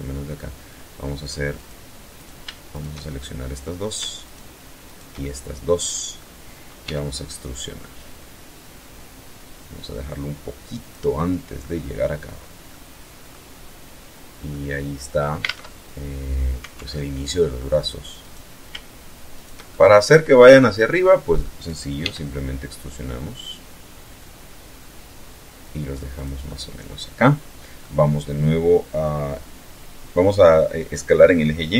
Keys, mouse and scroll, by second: 0.6 click, 1.3 right click, 1.8 shift+right click, 2.1-2.9 shift+middle drag, 3.3 shift+right click, 3.9 shift+right click, 4.3-5.4 shift+middle drag, 5.9 e, 9.9 click, 10.2-10.9 middle drag, 11.4 scroll down 1, 11.8 middle click, 12.7 scroll up 1, 13.5 middle click, 14.5 alt+Tab, 15.8 alt+Tab, 16.1-16.8 alt+middle drag, 17.2 right click, 18.4 shift+right click, 18.7-19.5 shift+middle drag, 19.5-19.9 scroll down 1, 20.0-20.6 middle drag, 21.0 e, 25.2 click, 25.5-27.0 middle drag, 31.0 s, 31.6 y.